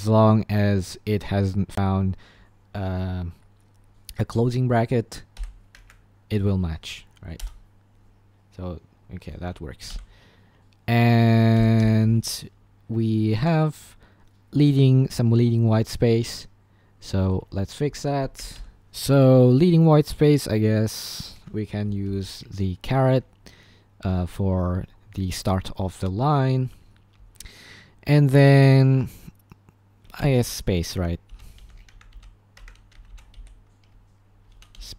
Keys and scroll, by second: 5.4 l, 5.9 Escape, 7.4 Return, 7.6 typing, 9.4 Escape, 9.9 k, 11.3-12.3 typing, 18.1-19.3 typing, 30.2-34.9 typing, 31.0 Escape.